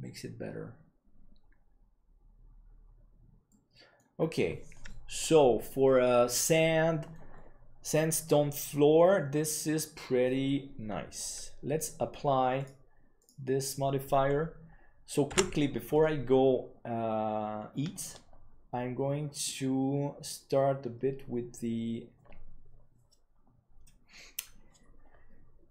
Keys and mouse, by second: 3.4-3.9 middle drag, 4.7-5.6 middle drag, 6.5-7.1 middle drag, 12.5-16.4 drag, 16.4 ctrl+s.